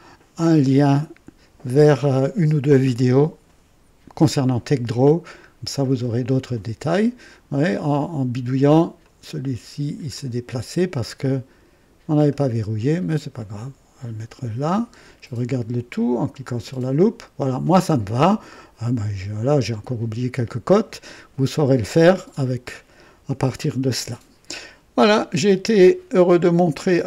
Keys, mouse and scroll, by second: 4.8-5.2 scroll down 1, 5.8-7.2 right drag, 8.9-10.3 drag, 11.0-12.0 drag, 12.3-12.9 right drag, 13.3-14.9 drag, 16.4 click.